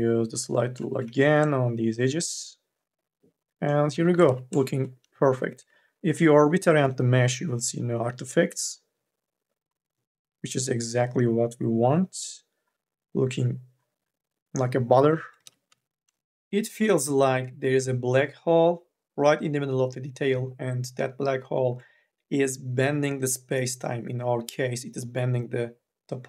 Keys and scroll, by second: 0.9 q, 15.5 q.